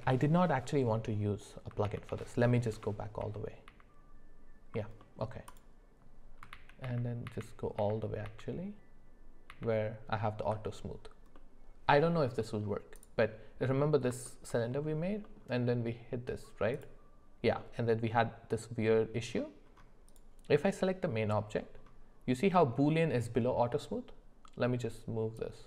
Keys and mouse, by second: 1.8-10.5 ctrl+z, 5.0 middle click, 11.3 middle click, 12.4 middle click, 14.2 shift+middle click, 15.2 middle click, 16.7 click, 17.6-19.3 middle drag, 20.1 click, 25.4-25.6 drag.